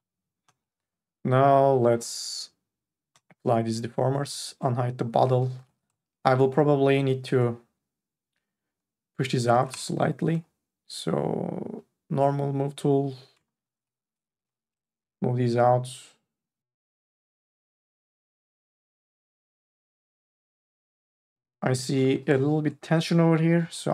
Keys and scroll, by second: 1.5 4, 5.3 3, 13.8 q, 14.3 n, 21.3 ctrl+z, 21.7-23.9 typing.